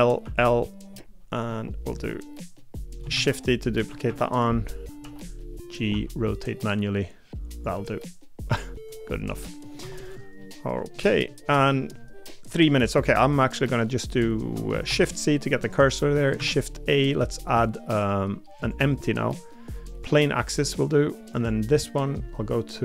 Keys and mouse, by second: 1.5 middle click, 2.8 middle click, 3.1 shift+d, 4.1 KP_7, 5.0 g, 5.9 r, 7.7 g, 9.3 middle click, 9.8 Tab, 10.4 middle click, 11.1 middle click, 11.5 middle click, 12.8 middle click, 14.9 shift+c, 15.6 middle click, 16.4 shift+a, 20.4 middle click.